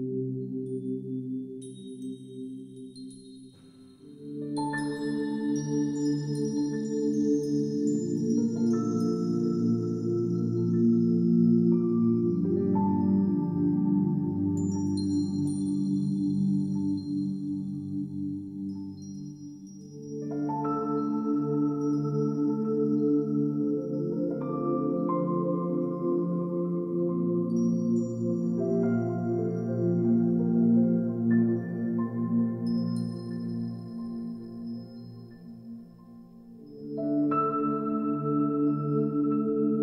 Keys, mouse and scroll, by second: 0.0 r, 0.6 g, 1.6 ctrl+z, 2.0 ctrl+z, 2.2 g, 2.6 shift+click, 2.8 scroll down 2, 2.8 shift+middle click, 2.9 scroll up 1, 2.9 g, 3.4 r, 3.5 g, 4.4 click, 4.5 scroll up 6, 4.6 shift+middle click, 4.7 shift+middle click, 4.8 scroll down 2, 4.9 shift+middle click, 4.9 scroll down 4, 5.0-12.7 typing, 5.7 click, 6.2 click, 6.3 click, 6.8 click, 8.2 click, 8.7 shift+click, 9.6 click, 10.1 click, 10.9 click, 11.3 click, 11.6 click, 12.5 click, 13.1 ctrl+s, 15.0 scroll up 1, 15.2 click, 15.3 click, 16.0 click, 16.1 shift+a, 16.5 r, 17.8 click, 18.5 ctrl+z, 18.6 ctrl+z, 18.8 ctrl+z, 18.8 click, 18.9 click, 19.0 r, 19.5 click, 19.8 click, 20.6 click, 20.8 click, 20.9 click, 21.1 ctrl+s, 21.9 click, 22.2 click, 22.4 click, 23.0 click, 23.3 click, 23.5 click, 23.7 click, 23.9 click, 24.0 click, 24.2 click, 24.5 click, 24.9 click, 25.0 click, 25.2 ctrl+s, 25.3 middle click, 25.3 scroll down 2, 25.4-26.1 scroll up 8, 25.5 click, 25.8 shift+middle click, 25.9 shift+middle click, 26.0 shift+middle click, 26.1 middle click, 26.2 middle click, 26.2 scroll down 2, 26.3 n, 26.5 click, 26.5 KP_0, 26.7 KP_0, 26.7 n, 26.8 shift+middle click, 27.1 shift+middle click, 27.2 scroll up 5, 27.2 shift+middle click, 27.4 shift+middle click, 27.7-28.3 scroll down 3, 27.7 shift+middle click, 27.9 ctrl+s, 28.6-33.7 typing, 29.0 scroll down 1, 29.3 middle drag, 29.5 click, 29.7 click, 29.9 click, 30.4 click, 31.3 click, 31.3 ctrl+z, 31.7 click, 31.9 click, 32.7 click, 33.4 click, 34.4 middle click, 34.4 scroll up 2, 34.4 shift+middle click, 34.5 shift+middle click, 34.6 scroll down 1, 34.7 click, 35.2 drag, 35.5 drag, 35.8 click, 36.0 click, 36.2 click, 36.5 click, 37.2 click, 37.5 scroll down 2, 37.6 click, 38.0 click, 39.1 click, 39.3 click.